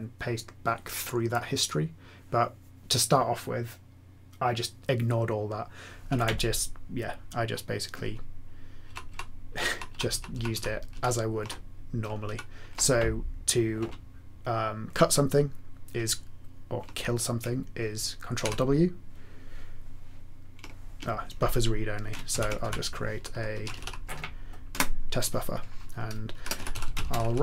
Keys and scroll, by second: 8.9 ctrl+shift+Right, 9.0 ctrl+shift+Right, 9.5 ctrl+shift+Right, 9.7 ctrl+shift+Right, 10.3 ctrl+shift+Right, 10.9 ctrl+shift+Left, 12.2 ctrl+shift+Left, 18.4 ctrl+w, 22.3 ctrl+x, 22.6-24.2 typing, 24.7 Return, 26.1-27.4 typing.